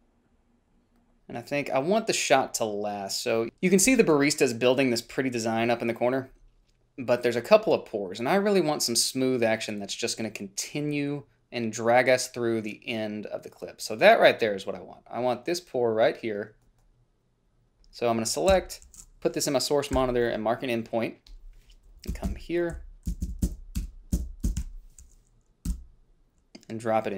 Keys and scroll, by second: 17.8 shift+x, 18.8 f, 20.3 i, 22.4 Up, 22.6 Up, 23.1 i, 23.4 Down, 23.5 Down, 23.7 Down, 24.1 Up, 24.8 Left, 24.9 o, 26.0 b.